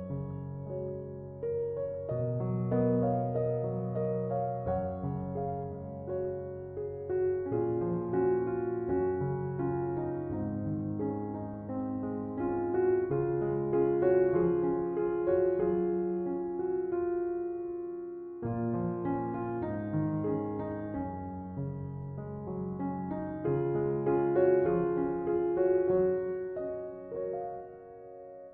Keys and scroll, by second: 7.2 typing.